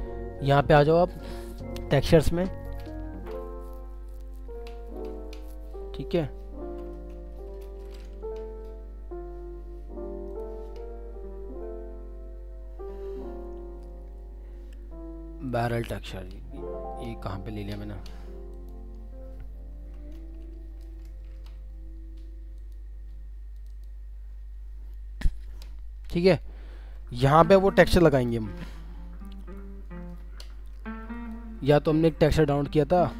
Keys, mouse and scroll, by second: 0.0-0.6 scroll down 1, 0.6-2.9 scroll up 1, 3.7 scroll down 1, 7.5 ctrl+o, 11.4-12.9 scroll down 1, 12.9 scroll up 1, 15.7 double click, 23.7 double click, 26.5 alt+scroll up 1, 28.2 F7.